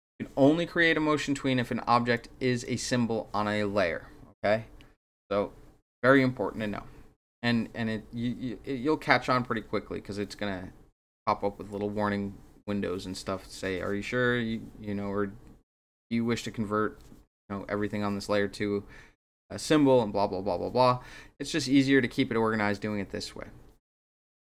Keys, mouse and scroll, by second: 2.1-2.6 drag.